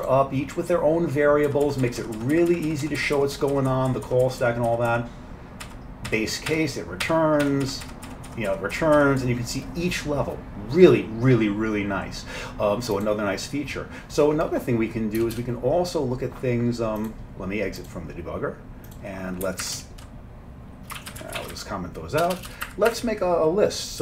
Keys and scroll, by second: 1.5 F7, 1.7 F7, 1.9 F7, 2.0 F7, 2.7 F7, 2.9 F7, 3.0 F7, 3.9-5.7 F7, 7.1 F7, 7.5 F7, 8.1 F7, 8.8 F7, 9.3 F7, 15.2 Return, 19.5 Up, 19.8 Right, 21.0-21.4 typing, 21.2 Down, 21.2 Left, 21.6 Down, 22.3 Return, 22.4 Return, 22.5 Return, 22.7 Up, 23.0 Up.